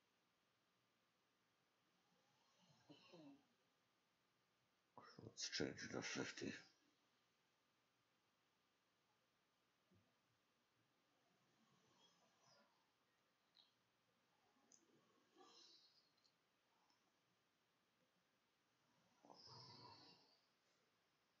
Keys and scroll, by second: 2.8-6.8 typing, 8.8 ctrl+shift+a, 9.0 ctrl+shift+s, 9.6-10.3 typing.